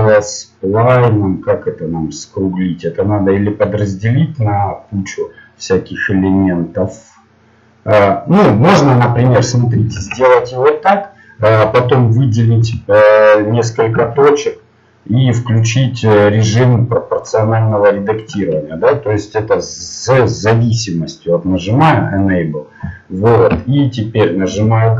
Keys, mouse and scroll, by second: 11.0 ctrl+Tab, 12.6 z, 13.9 a, 17.2-24.5 drag, 24.5 g.